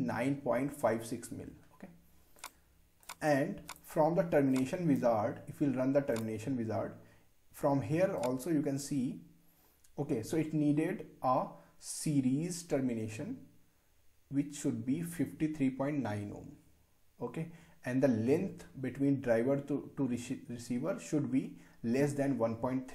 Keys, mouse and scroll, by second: 2.4 click, 4.0 click, 6.2-22.9 drag.